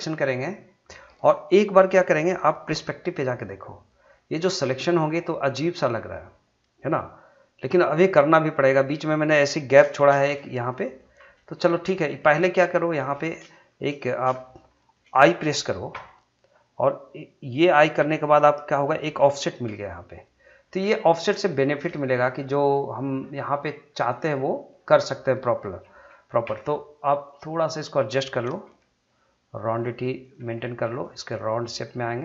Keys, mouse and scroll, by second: 2.8-10.0 middle drag, 10.0 shift+z, 10.7 middle click, 11.3 scroll down 1, 11.5 shift+middle click, 11.9 scroll up 1, 12.2 middle click, 12.6 scroll up 1, 12.8 shift+middle click, 13.1 middle click, 13.5 shift+middle click, 13.9 middle click, 14.3 shift+middle click, 19.0 click, 19.9 middle click, 20.7 scroll up 1, 21.0 shift+middle click, 21.5 middle click, 22.0 shift+middle click, 23.9-26.5 middle drag, 26.5 1, 27.2 click, 28.6 g, 29.7 click, 30.3 g, 30.9 click, 31.3 middle click.